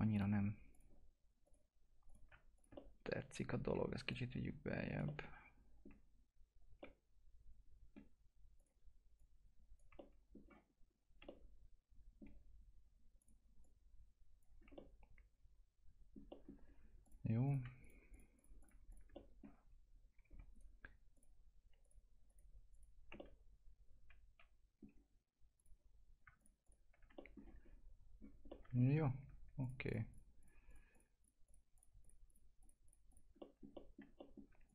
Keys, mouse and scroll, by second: 0.1 click, 2.5 ctrl+click, 2.7 alt+middle click, 3.7 w, 4.1 click, 5.3-8.5 alt+middle drag, 8.5 click, 10.0 alt+middle click, 10.7-11.2 scroll up 1, 11.2-13.2 alt+middle drag, 13.2 click, 14.5 scroll down 1, 14.7-16.3 alt+middle drag, 17.0 click, 17.8 ctrl+click, 19.1 middle click, 20.2 1, 20.5 right click, 21.1 click, 22.9 scroll down 1, 23.4-25.5 alt+middle drag, 25.5 click, 27.1 alt+middle click, 27.6-28.2 scroll up 1, 28.5 middle click, 29.0 scroll up 1, 29.6 ctrl+click, 33.4 middle click, 33.7 alt+middle click, 34.6 ctrl+click.